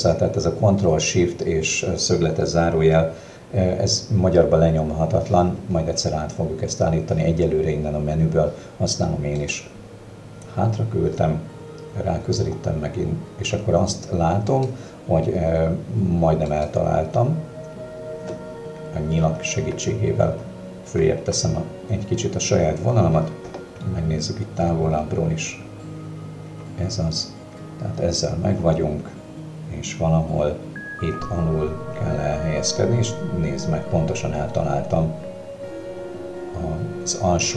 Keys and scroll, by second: 19.3 Up, 20.3 Down, 20.9 Up, 23.3 Down.